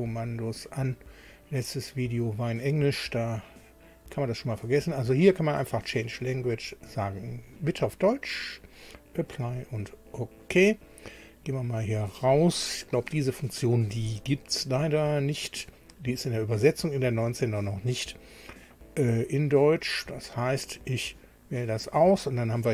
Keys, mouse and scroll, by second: 6.2 click, 7.2 click, 8.7 click, 9.5 click, 11.8 click, 12.3 click, 15.6 click, 20.0 click.